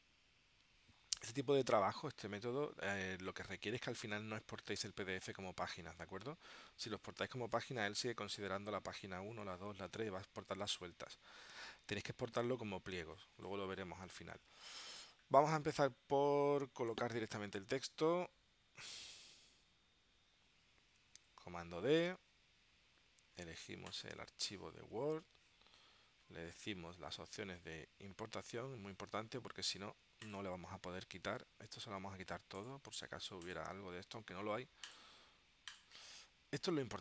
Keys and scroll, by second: 21.9 super+d.